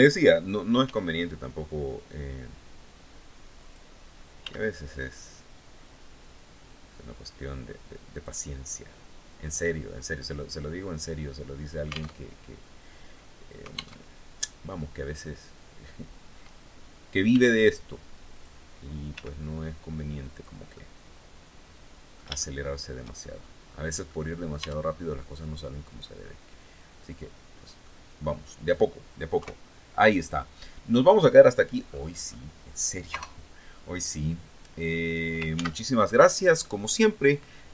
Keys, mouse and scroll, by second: 0.3 g, 3.1 click, 3.9 s, 7.7 click, 8.2-8.6 scroll down 2, 9.5 scroll up 2, 11.7 alt+Tab, 13.5 alt+Tab, 14.0-14.3 scroll down 2, 14.5 scroll up 2, 16.8 s, 17.9 click, 18.7 g, 19.9 click, 20.3-22.7 middle drag, 23.1 scroll up 2, 23.2 scroll down 2, 23.6 middle click, 24.1 Tab, 24.4 scroll down 2, 24.7 click, 25.4 right click, 26.6 click, 27.1 scroll down 1, 27.3 click, 28.9 KP_3, 30.5-31.2 scroll down 3, 31.4-32.1 scroll up 4, 32.6 KP_0, 35.1 ctrl+s, 35.6 click.